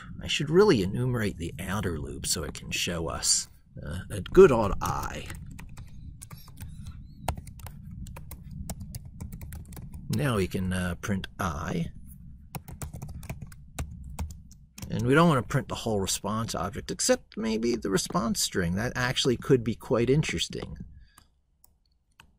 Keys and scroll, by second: 5.1 ctrl+Right, 6.1 ctrl+shift+Left, 7.5 ctrl+Left.